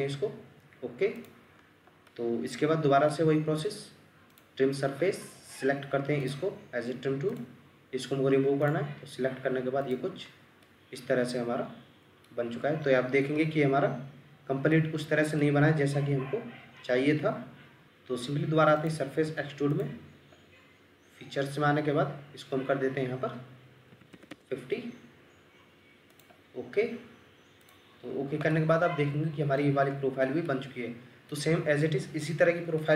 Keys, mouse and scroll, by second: 1.5-2.1 scroll up 1, 2.1 middle click, 3.1-4.8 scroll up 1, 10.2-10.6 scroll up 1, 10.6 middle click, 12.6-13.0 scroll down 1, 13.4 middle click, 14.7-15.4 scroll up 1, 15.4 middle click, 17.8 Escape, 23.9 typing, 24.3 Return, 28.0-28.5 scroll up 1, 28.5 middle click, 29.8-30.5 scroll up 1, 30.5 middle click, 31.8-32.3 scroll down 1, 32.3-32.8 scroll up 1, 32.8 middle click.